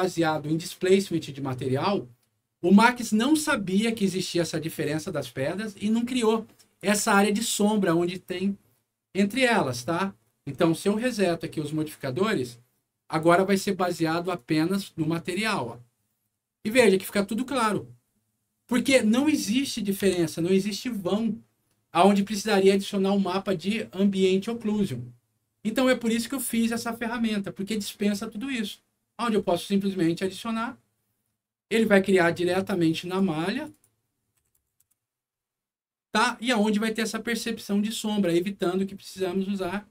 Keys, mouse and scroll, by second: 3.2 scroll up 2, 6.4 middle click, 10.9 click, 13.4 scroll down 2, 14.3 click, 17.0 scroll up 2, 19.4 middle click, 20.1 F4, 26.2 scroll down 2, 30.0 click, 33.0 click, 33.4 click, 33.6 click, 34.3 KP_1, 34.6 KP_0, 34.8 Return, 36.5 scroll up 1, 37.8 scroll down 1.